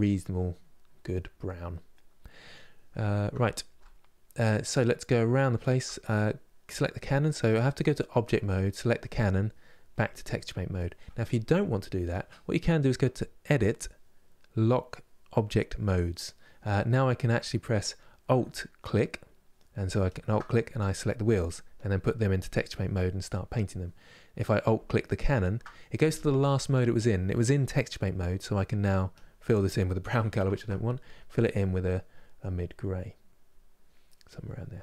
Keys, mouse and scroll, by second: 7.9 click, 10.4-16.6 drag, 16.6-19.8 middle drag, 19.8 alt+click, 22.2 click, 22.7-25.0 middle drag, 25.0 alt+click, 27.7-28.9 middle drag, 28.9-30.2 drag, 30.2 ctrl+z, 32.3 middle click, 32.5 click, 34.0 click, 34.5-34.8 middle drag.